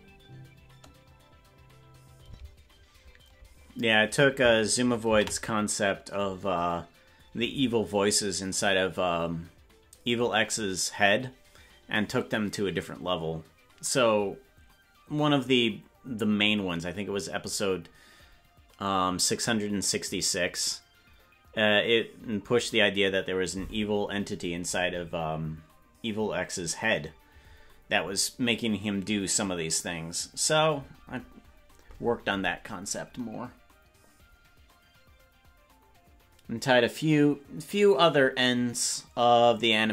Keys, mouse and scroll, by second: 2.4 space, 8.5 ctrl+s.